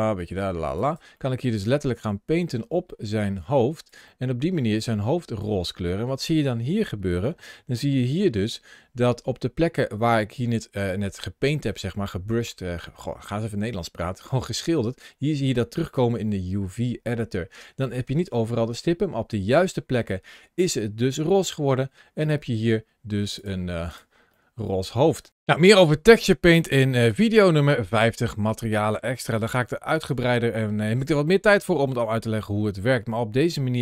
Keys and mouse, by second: 0.6 click, 1.0 middle click, 1.5-3.8 drag, 4.0 middle click, 4.8 click, 7.7 ctrl+shift+a, 22.2-22.5 drag, 23.2-23.8 drag, 24.3 middle click, 26.0-26.4 shift+middle drag, 28.7-29.2 middle drag, 29.6 shift+middle click, 30.5 shift+middle click, 31.1-31.5 middle drag, 31.8 shift+click, 32.3-33.0 middle drag, 33.0-33.4 shift+drag.